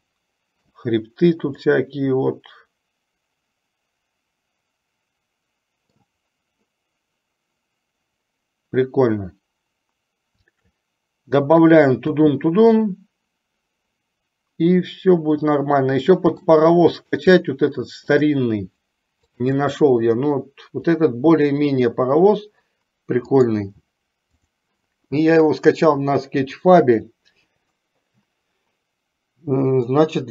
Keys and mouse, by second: 1.9-6.1 middle drag, 12.2 space, 13.0-16.6 middle drag, 17.5-18.4 shift+middle drag, 19.5 click, 24.5 click, 26.6 click, 30.0-30.3 middle drag.